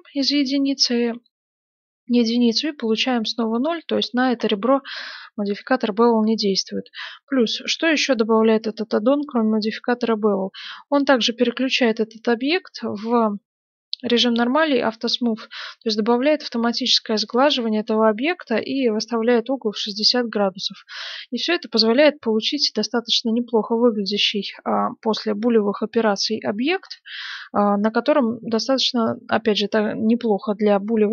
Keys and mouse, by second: 3.3-8.5 middle drag, 5.3 Tab, 8.7-14.0 middle drag, 14.0 click, 15.3-30.0 middle drag.